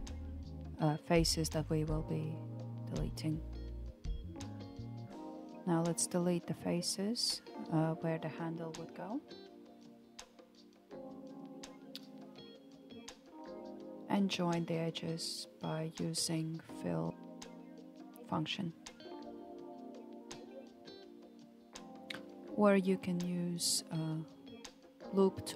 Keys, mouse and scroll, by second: 0.3 click, 1.8-2.9 drag, 3.4 shift+click, 3.8 shift+click, 4.2 shift+click, 5.2 Delete, 6.9 click, 7.7 shift+click, 8.1 shift+click, 8.6 shift+click, 9.7 Delete, 11.0-12.0 scroll up 2, 12.0-12.4 shift+middle drag, 12.4-13.0 scroll up 2, 13.0-17.6 shift+middle drag, 17.6 click, 19.3 shift+click, 20.1 shift+click, 21.4 alt+z, 22.7 shift+click, 23.8 f, 25.3 alt+z.